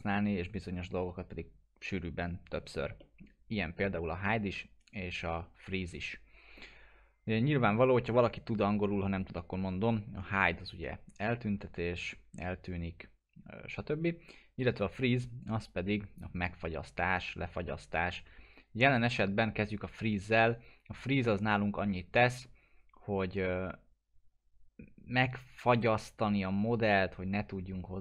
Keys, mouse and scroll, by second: 3.4-3.9 scroll down 1, 3.9-4.3 scroll up 1, 4.3-4.8 scroll down 1, 4.8 scroll.